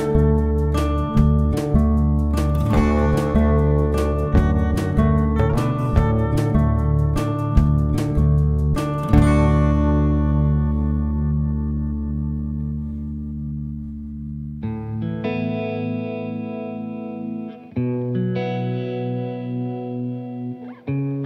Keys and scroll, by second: 0.8 F1, 1.2-2.1 typing, 4.3 +, 4.5 space, 5.7 shift+F6, 12.2 F1, 14.1 F1, 14.5-15.6 typing, 16.0 ctrl+s, 17.8 ctrl+d.